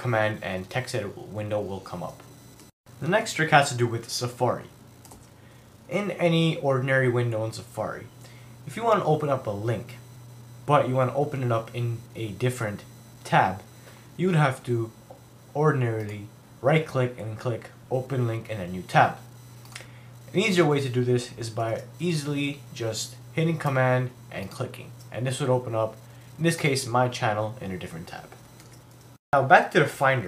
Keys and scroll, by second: 28.6 super+w.